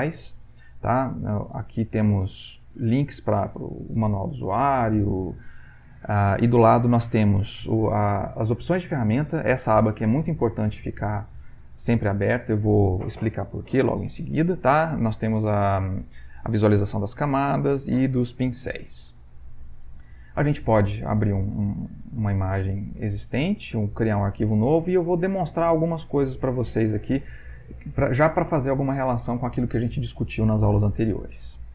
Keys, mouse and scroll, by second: 30.9 click.